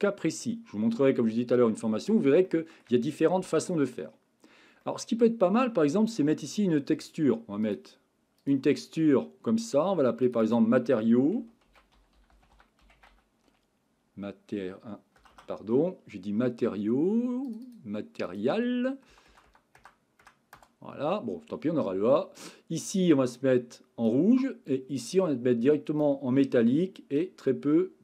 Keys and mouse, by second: 1.0 shift+middle click, 1.6 middle click, 2.4-2.8 shift+middle drag, 4.8-6.4 middle drag, 7.6 click, 8.4 click, 10.2 click, 10.5 click, 15.3 BackSpace, 17.6 click, 19.3 BackSpace, 19.8 BackSpace, 25.2 click, 27.2-28.0 drag.